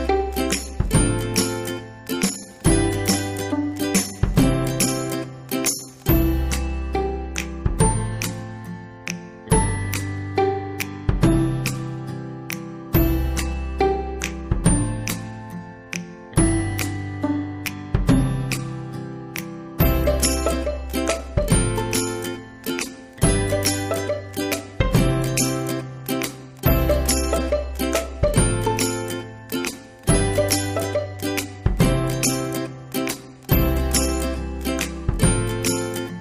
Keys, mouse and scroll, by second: 2.5 ctrl+a, 3.8-5.3 drag, 5.3-6.1 typing, 10.7-17.3 drag, 17.1-18.9 typing, 20.9-26.0 drag, 26.0 BackSpace, 35.2 click.